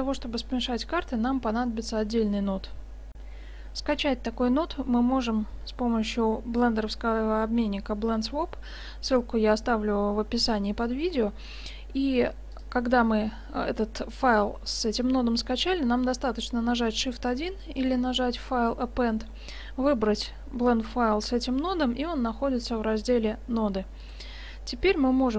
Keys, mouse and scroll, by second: 3.2 F9, 12.6-14.5 drag, 19.3 click, 24.1-25.3 drag.